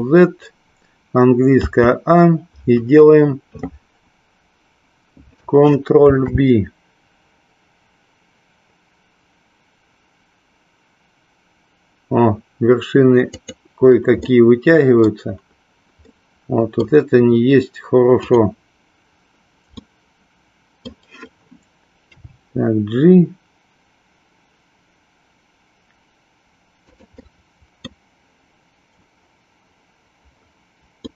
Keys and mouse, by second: 1.5 a, 6.1 ctrl+b, 13.3 click, 14.2 middle click, 16.1 middle click, 19.7-21.0 middle drag, 22.0 g, 27.2 middle click, 31.0-31.1 middle drag.